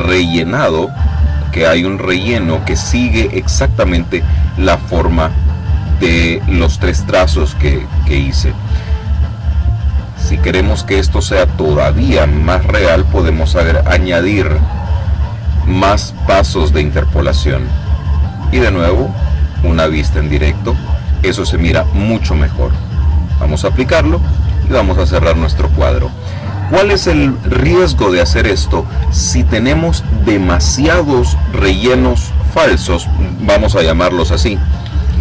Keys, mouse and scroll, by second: 10.2 click, 11.3-17.5 middle drag, 12.2 Home, 13.0 KP_1, 17.5 click, 22.8 click, 23.8 click.